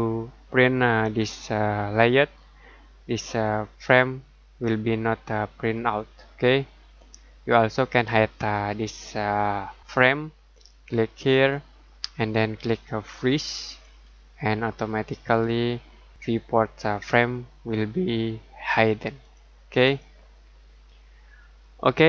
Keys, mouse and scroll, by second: 1.0 Escape, 11.3 click, 19.2 click.